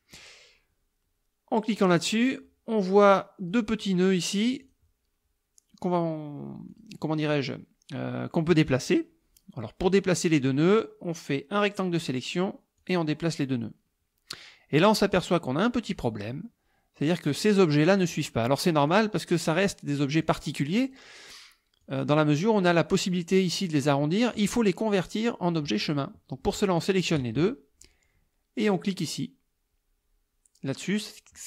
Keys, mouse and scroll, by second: 2.0 click, 3.5 click, 4.7 click, 6.7 click, 8.8-10.1 drag, 10.3-12.3 drag, 12.8-16.1 drag, 17.3 click, 18.0 click, 18.8 click, 19.4 click, 20.3 click, 20.9 click, 21.8 click, 22.5 click, 24.3 click, 24.8 click, 26.8 shift+click.